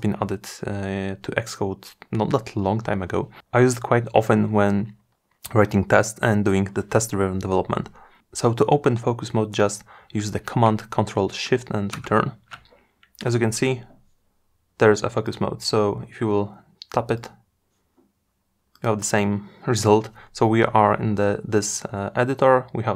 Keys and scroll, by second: 10.2 ctrl+shift+super+Return.